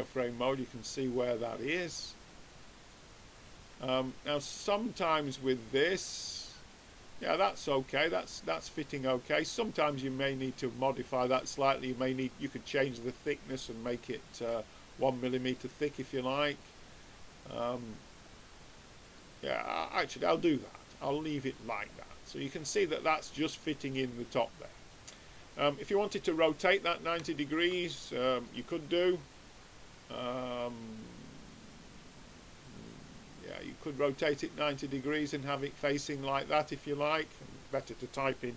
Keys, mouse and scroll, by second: 2.2-3.9 drag, 4.3-7.8 middle drag, 10.4-12.1 middle drag, 12.5-15.3 middle drag, 16.5-18.4 drag, 18.6-20.3 middle drag, 20.9-22.5 drag, 21.9-23.4 middle drag, 23.6 middle click, 24.0-27.2 middle drag, 27.3-28.4 middle drag, 28.4-30.2 drag, 32.6-34.4 drag, 36.5-37.6 middle drag, 37.6-38.5 drag.